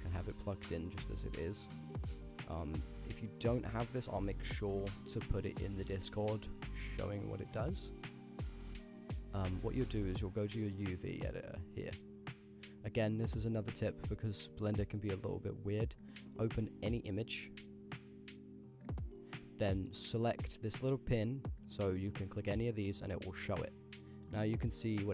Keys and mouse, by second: 0.0 click, 0.6 click, 0.8 x, 1.1 middle click, 1.4 middle click, 2.0 click, 2.2 middle click, 3.5-4.6 drag, 5.5 click, 5.7 click, 13.5 n, 14.8 click, 16.8 click, 17.4-18.7 drag, 19.8 click, 21.7 click, 22.7-23.6 drag, 24.9 drag.